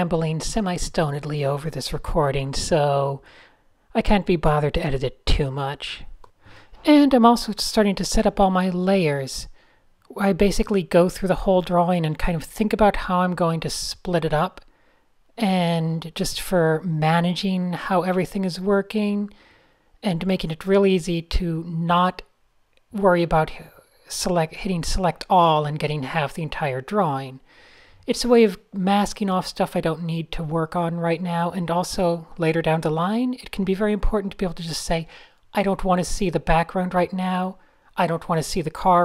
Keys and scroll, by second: 0.0-0.7 typing, 2.1 Left, 2.2 Right, 2.3 Delete, 2.5 Return, 2.5 e, 6.5 super+-, 7.3 alt+super+l, 7.8-12.7 typing, 22.2 p, 25.5 alt+shift+super+g, 25.6 typing, 25.8 Return, 26.4 alt+shift+super+r, 27.1 shift+super+r, 31.9 p, 33.0 super+z, 34.5 super+z, 34.6 super+z, 36.2 super+z, 36.3 super+z, 37.0 Tab.